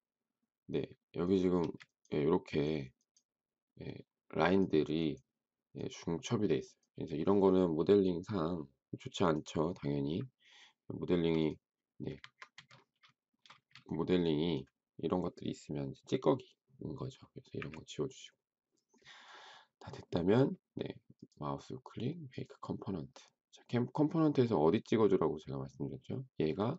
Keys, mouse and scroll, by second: 1.6 space, 11.1 m, 12.2 Escape, 13.1 shift+middle click, 13.5 space, 17.5 Delete.